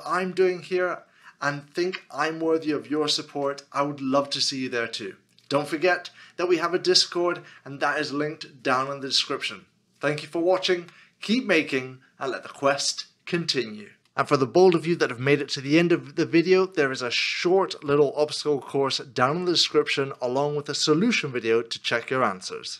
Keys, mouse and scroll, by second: 14.0 middle click, 17.9 shift+middle click, 20.2 middle click.